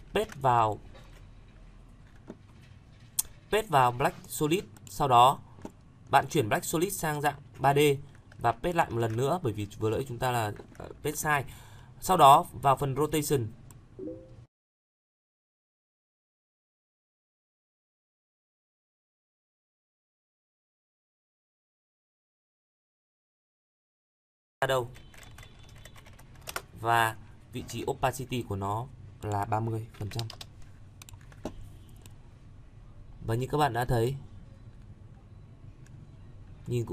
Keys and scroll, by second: 0.0 ctrl+v, 8.8 ctrl+v.